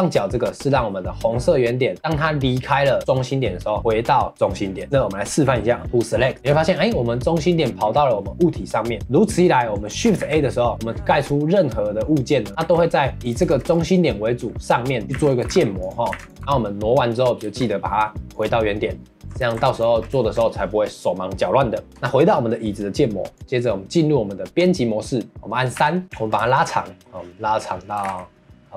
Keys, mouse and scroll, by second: 6.4-10.2 shift+middle drag, 10.2 shift+a, 13.5 shift+middle drag, 13.7-14.6 scroll up 1, 14.6-15.0 middle drag, 15.0 scroll down 2, 15.1 shift+d, 15.4 g, 16.1 shift+d, 16.4 ctrl+s, 17.4 shift+s, 19.4 ctrl+s, 20.0 scroll down 1, 20.2-23.3 shift+middle drag, 23.3 click, 23.4 Tab, 25.3-25.7 scroll up 1, 25.7 3, 26.0 middle click, 26.3 scroll down 1, 26.5-28.0 shift+middle drag, 28.0 g.